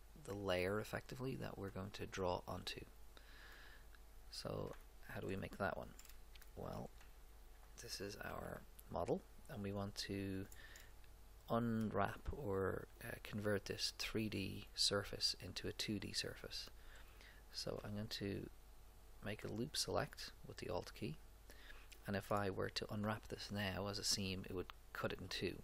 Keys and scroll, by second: 8.3 a.